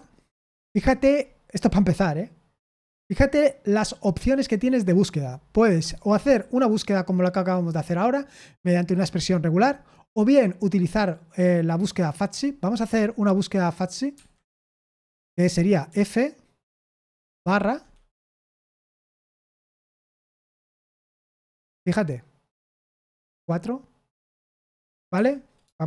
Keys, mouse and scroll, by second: 2.2-14.1 scroll down 1, 14.1 Escape, 15.8 f, 17.4 shift+/, 19.0 f, 22.8 BackSpace, 23.2 BackSpace, 24.7 Escape, 25.1 Escape.